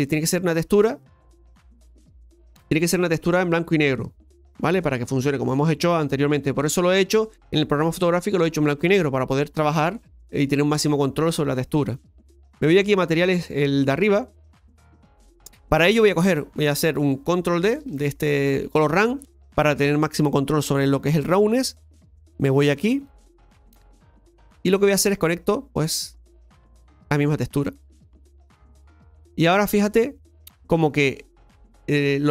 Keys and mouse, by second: 1.0-4.1 right drag, 13.0 click, 15.8 middle click, 16.9 click, 21.8-23.8 drag, 23.8-25.8 middle drag, 25.8-28.9 drag, 28.9-32.3 middle drag.